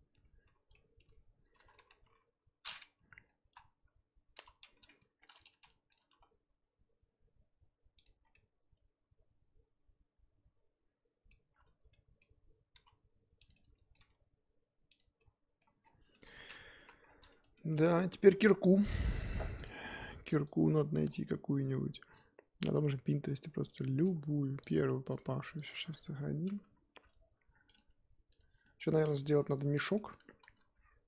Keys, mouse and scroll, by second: 0.7-1.8 middle drag, 1.8 KP_3, 5.5 g, 8.2 scroll down 4, 8.3-11.3 middle drag, 11.5-11.9 scroll up 4, 11.9-12.7 middle drag, 12.7 s, 13.5 middle click, 14.0 g, 15.1-15.8 middle drag, 15.8 scroll down 3, 16.2 click, 16.3-16.8 scroll down 5, 16.8 KP_1, 17.0-17.5 scroll down 3, 17.5-28.3 shift+middle drag, 28.3 click, 29.3-29.7 scroll down 1, 29.7-31.0 shift+middle drag.